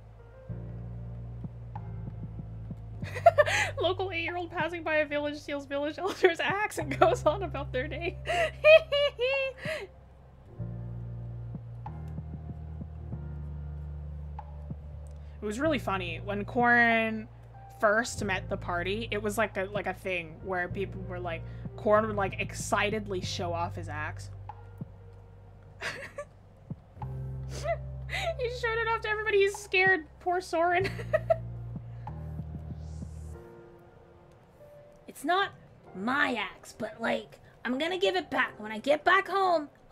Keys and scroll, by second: 0.8 scroll up 1.